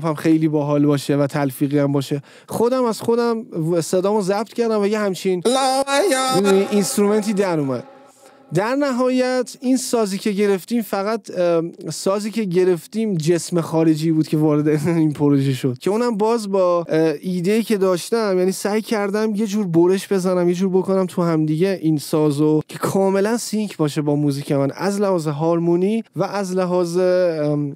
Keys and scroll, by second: 5.4 space, 6.6 space.